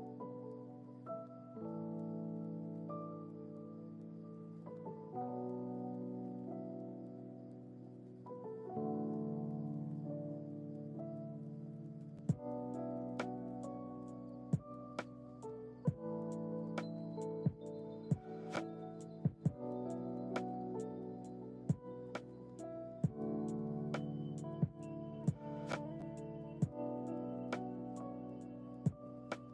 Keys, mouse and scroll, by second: 0.1 ctrl+shift+z, 2.0 click, 3.4 space, 3.5 click, 5.1 click, 5.9 click, 7.4 click, 10.1-10.9 drag, 12.9 drag, 14.1-23.2 drag, 23.2 space, 25.9 click, 28.8 click.